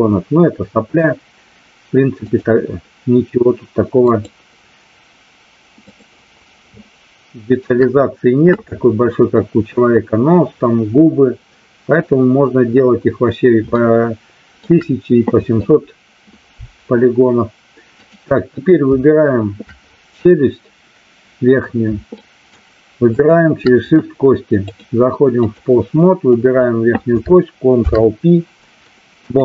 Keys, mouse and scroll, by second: 4.1 click, 6.7-7.6 shift+middle drag, 13.7-14.6 shift+middle drag, 22.1-22.6 shift+middle drag, 23.1 shift+click, 24.7-25.6 drag, 26.4 drag, 27.7 ctrl+p.